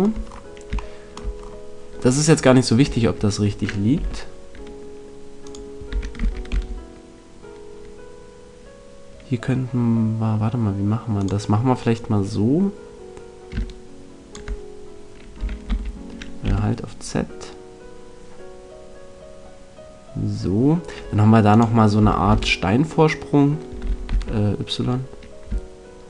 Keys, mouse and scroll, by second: 0.3-2.2 middle drag, 0.8 right click, 2.8 e, 5.5 click, 5.9 e, 11.2 click, 15.3 e, 21.5 click, 21.9 e.